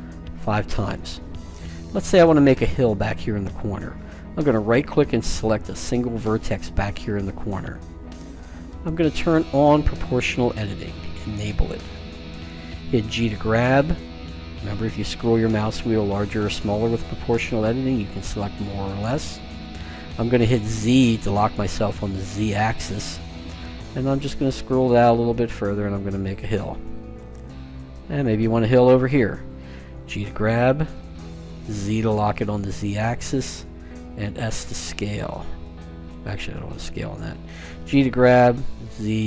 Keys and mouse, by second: 4.5-6.2 right drag, 9.4-11.4 drag, 12.9 g, 28.7-30.5 right drag, 30.1 g, 37.6 g.